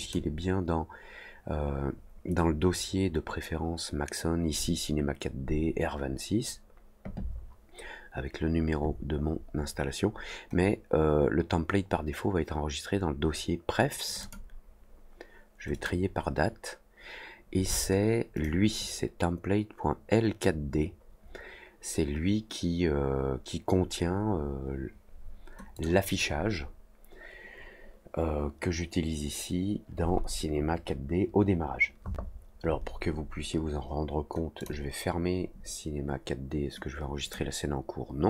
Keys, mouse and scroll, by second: 14.0 click, 14.1 click, 15.7 click, 18.3 click, 25.7 click, 34.5 click, 37.2 click.